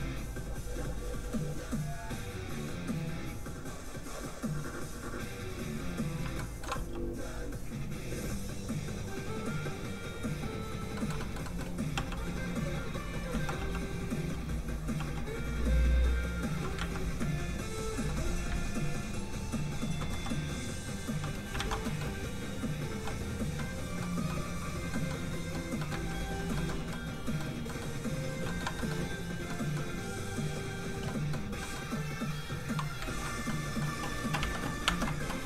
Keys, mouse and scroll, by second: 0.7 z, 0.8 click, 6.3 shift+middle click, 6.6 scroll up 1, 6.7 f, 6.9 click, 10.9 middle click, 11.2 shift+middle click, 11.4 middle click, 11.5 middle click, 11.9 f, 12.1 click, 12.6 ctrl+click, 13.3 ctrl+z, 13.6 f, 13.8 click, 14.3 f, 14.4 click, 14.9 f, 15.1 click, 16.8 ctrl+z, 17.2 ctrl+click, 17.9 ctrl+z, 18.5 ctrl+click, 20.1 click, 21.5 alt+shift+z, 21.8 alt+middle click, 21.9 middle click, 22.5 click, 23.5 middle click, 25.9 ctrl+z, 26.5 shift+middle click, 26.8 scroll up 1, 26.9 middle click, 28.4 shift+middle click, 28.6 scroll down 1, 28.7 middle click, 30.3 click, 31.0 middle click, 32.3 click, 33.0 ctrl+z, 33.2 scroll down 2, 33.4 middle click, 33.6 shift+middle click, 34.4 alt+shift+Tab.